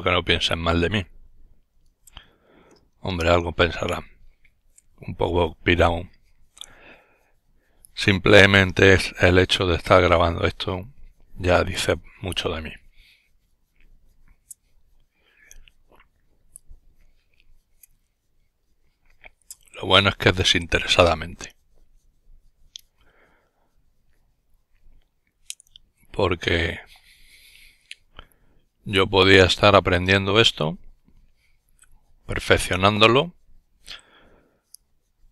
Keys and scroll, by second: 2.4 s, 2.9 Return.